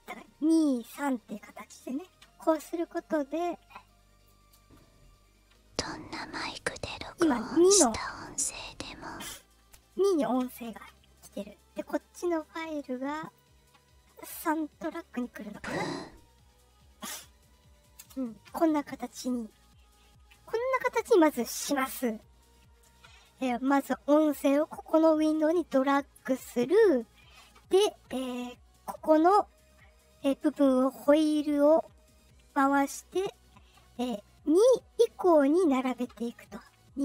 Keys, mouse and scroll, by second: 3.8 click, 4.5 space, 9.5 space, 11.7 click, 13.2 click, 15.5 space, 17.9 space, 19.3-20.0 ctrl+scroll up 6, 30.7 scroll down 1, 31.2 scroll down 1, 32.5 scroll down 1, 33.1 scroll down 1, 34.4 click.